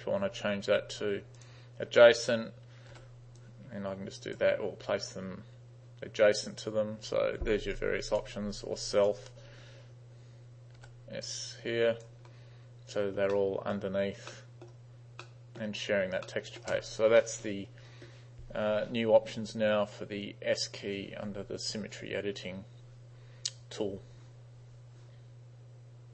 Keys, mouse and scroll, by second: 1.4 click, 3.0 s, 3.4-4.4 drag, 7.8 right click, 9.0 drag, 10.8 s, 11.3 click, 13.2 space, 13.4 middle click, 14.4 middle click, 15.3 middle click, 16.3 middle click.